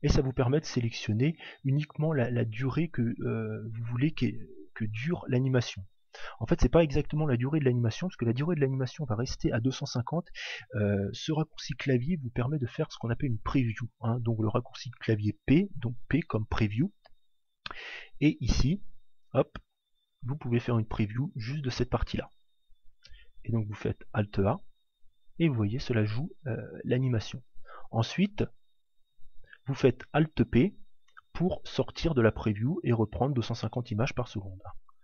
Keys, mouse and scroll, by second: 23.6 alt+a, 27.5 alt+a, 29.1 alt+p, 31.4 middle click, 33.9 click.